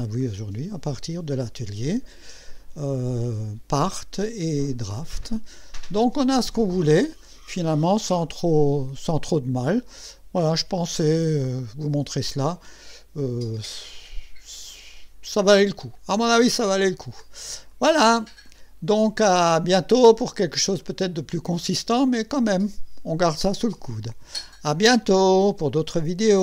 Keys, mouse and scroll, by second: 0.2 click, 1.4 click, 2.6 right click, 3.4 scroll up 2, 6.4 click, 8.6 click, 9.9-15.2 drag, 16.1 scroll down 1, 16.6 scroll up 1, 16.9 scroll down 1, 17.7-18.4 right drag, 18.5-20.7 drag, 20.8-22.1 drag.